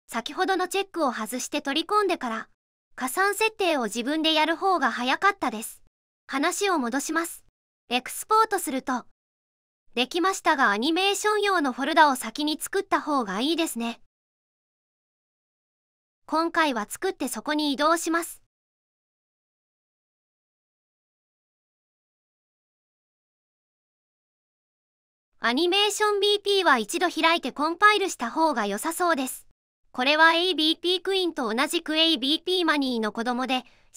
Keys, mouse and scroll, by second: 1.3 click.